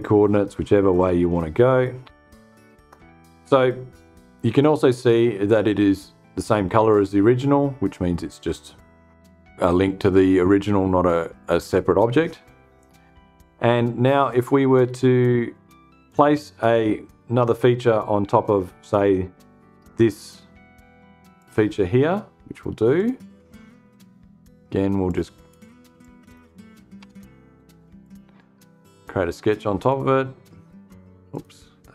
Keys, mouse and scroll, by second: 1.6-1.9 scroll up 2, 20.9 click, 22.4 click, 24.6 click, 25.5 click, 26.5 BackSpace, 27.5 click, 29.3 click, 30.8 click.